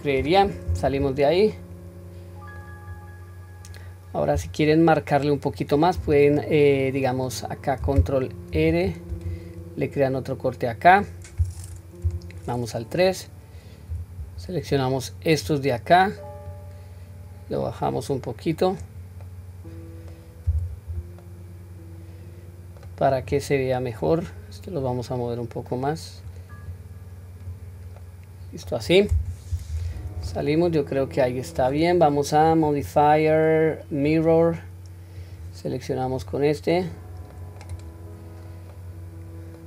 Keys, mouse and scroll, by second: 0.7 Tab, 1.1-1.6 scroll down 2, 1.5-2.6 middle drag, 2.9-3.7 scroll up 1, 3.7-4.2 scroll up 1, 4.4 Tab, 8.5 ctrl+r, 12.1 KP_3, 13.9 q, 14.7 click, 16.5 click, 16.7-18.8 drag, 19.3 middle click, 20.6 q, 21.2-22.9 middle drag, 23.3 click, 24.8-26.3 drag, 26.7 click, 28.0 middle click, 28.9-29.7 scroll down 1, 29.7 Tab, 30.3-31.5 middle drag, 32.5-34.2 drag, 35.2 click, 36.9-37.3 scroll down 1, 37.3 middle click, 37.7 click, 38.3 scroll down 1, 38.7-39.6 middle drag.